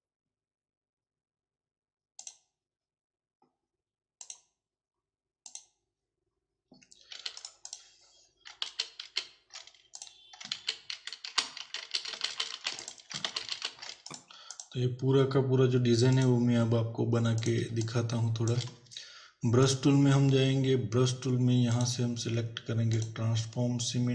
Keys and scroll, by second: 7.2 z, 8.7 ctrl+alt+z, 10.6 ctrl+alt+z, 13.3 ctrl+alt+z, 17.8 space.